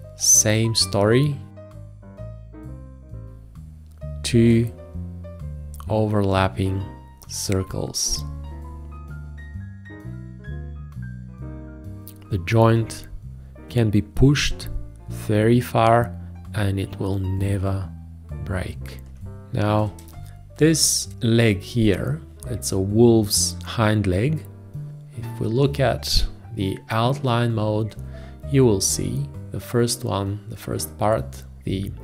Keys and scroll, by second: 19.3 space.